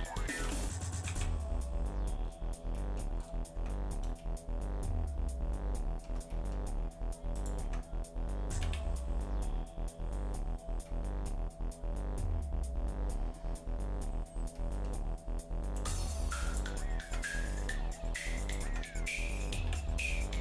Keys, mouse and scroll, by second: 0.3 ctrl+z, 1.0 a, 2.2-2.7 scroll down 3, 2.7 middle click, 3.2-3.5 scroll up 2, 3.5 Tab, 4.2-6.1 shift+middle drag, 6.3 middle click, 7.3 click, 7.6 Tab, 8.6 a, 10.8 middle click, 14.5 middle click, 15.7-16.8 right drag, 17.0 Tab, 17.4 middle click, 18.4 click, 18.6 Tab, 19.6 a.